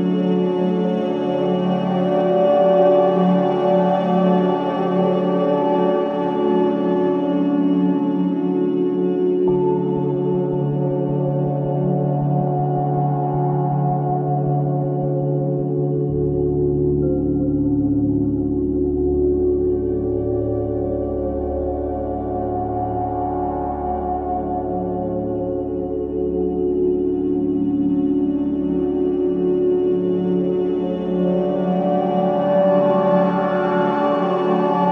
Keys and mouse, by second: 0.0 click, 1.2 space, 2.4 space, 2.8-4.4 drag, 4.7 space, 5.5 space, 6.6 click, 10.5 click, 11.6 space, 13.0 space, 13.6 click, 14.4 space, 15.8 space, 16.5-18.3 drag, 18.3 space, 19.5 space, 20.8-22.4 drag, 23.7 click, 24.9 click, 26.5 h, 27.9 click, 29.6 click, 30.6 space, 31.6 space, 32.6-34.9 drag.